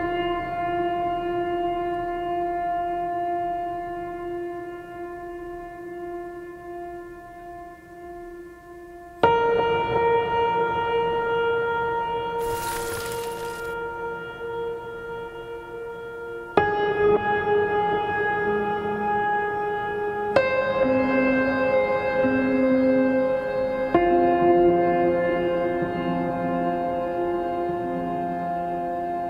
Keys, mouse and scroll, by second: 0.1 right click, 1.2 right click, 13.4 right click, 20.3 right click, 20.9 right click, 21.2 right click.